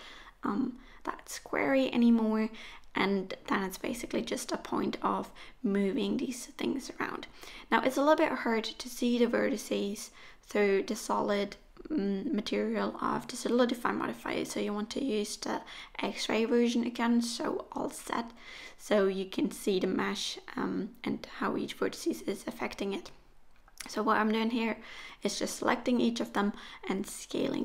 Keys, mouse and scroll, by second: 0.7 middle click, 2.0 KP_1, 2.6-3.7 scroll up 1, 5.7 Tab, 5.7 middle click, 6.3 click, 8.8 alt+z, 9.2 middle click, 11.1 ctrl+a, 12.9 click, 13.4 ctrl+a, 15.2 click, 15.9 ctrl+a, 17.5 click, 17.8 ctrl+a, 19.5 click, 20.0 ctrl+a, 21.1 click, 21.6 ctrl+a, 23.0 click, 23.4 ctrl+a, 25.8 click, 26.2 ctrl+a, 27.0 middle click.